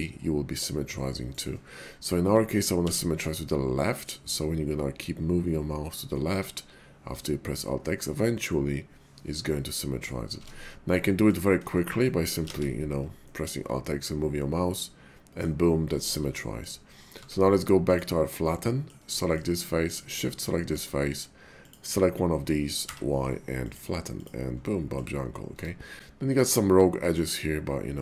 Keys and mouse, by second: 1.3 right click, 2.9 alt+x, 9.7 middle click, 10.3 ctrl+z, 11.0 click, 11.7 shift+click, 12.0 click, 12.5 alt+x, 13.2-15.4 middle drag, 15.9 shift+middle click, 16.4 middle click, 17.1 Tab, 17.8 click, 18.4 middle click, 19.2 shift+middle click, 19.8 shift+click, 20.5 middle click, 21.6 shift+click, 21.7 shift+middle click, 22.8 y, 24.6 middle click, 25.5 Tab, 26.0 middle click, 27.4-28.0 middle drag.